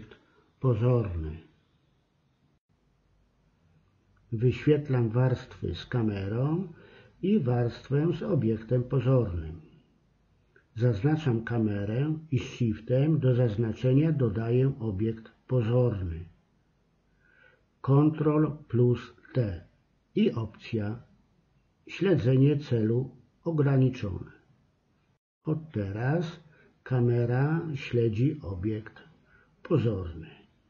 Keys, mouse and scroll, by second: 3.1-5.1 middle drag, 7.2 middle click, 11.7-13.2 middle drag, 16.3 ctrl+t, 24.5-25.6 middle drag, 25.6 g, 28.8 ctrl+z, 29.8 KP_1.